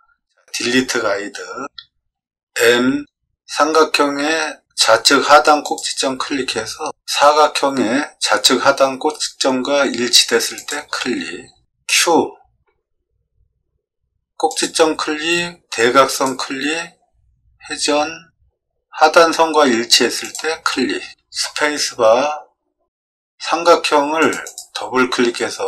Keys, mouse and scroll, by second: 2.7 m, 5.6 click, 10.5 click, 12.6 q, 14.4 click, 20.2 click, 21.4 space, 24.1 click, 24.4 click.